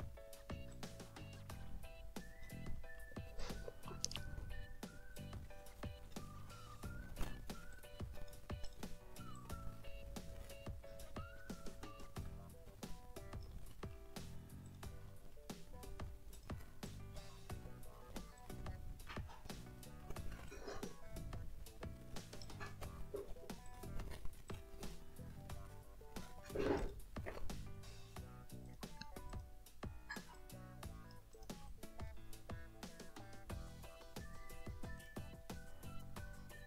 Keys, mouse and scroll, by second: 0.7-2.6 drag, 2.8 middle click, 3.4 ctrl+shift+click, 3.7 ctrl+shift+scroll down 1, 3.9 ctrl+shift+middle click, 4.7 ctrl+d, 5.2 ctrl+click, 6.0 click, 7.7 ctrl+click, 8.7 ctrl+click, 8.9 ctrl+middle click, 9.1 ctrl+scroll up 1, 9.3-13.6 ctrl+drag, 13.7 ctrl+middle click, 14.1 ctrl+scroll down 2, 14.7 ctrl+shift+click, 15.1 ctrl+shift+click, 16.3 click, 16.8 ctrl+shift+click, 17.2 ctrl+shift+click, 18.0 ctrl+d, 18.4-19.7 ctrl+drag, 19.7 click, 20.5-22.3 drag, 22.4 click, 23.7 ctrl+click, 23.9 ctrl+scroll up 2, 24.5-26.4 ctrl+drag, 26.5 ctrl+scroll down 2, 26.8 ctrl+click, 28.7 click, 29.3 click, 30.3 ctrl+click, 31.5 ctrl+click, 31.7 ctrl+click, 32.1 middle click, 33.6 middle click, 35.0 click, 36.2 ctrl+click.